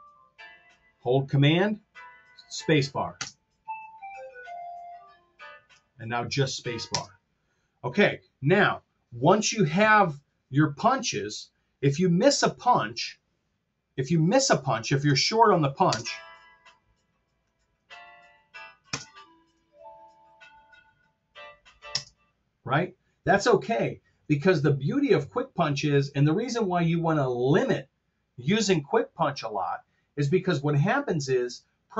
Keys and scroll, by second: 3.2 super+space, 6.9 space, 15.1 super+z, 15.7 space, 18.9 super+space, 22.0 space.